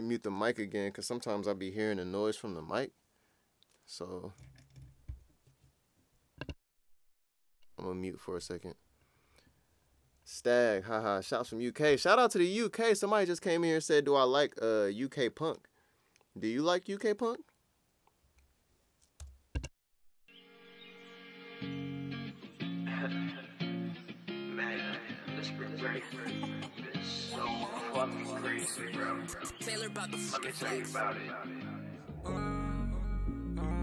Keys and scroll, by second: 19.1 Return, 19.6 space, 26.2 super+Tab, 27.4 super+Tab.